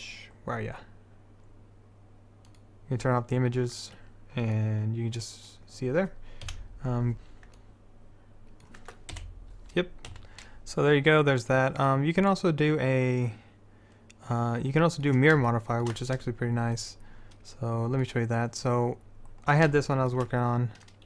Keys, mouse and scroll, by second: 2.6-4.0 middle drag, 4.0-6.6 drag, 6.6 F12, 7.2 shift+a, 9.3 KP_7, 10.3 a, 12.0-13.0 drag, 14.0 middle click, 15.6-17.5 middle drag, 18.2 click, 19.1 middle click, 19.5 click, 20.1 middle click.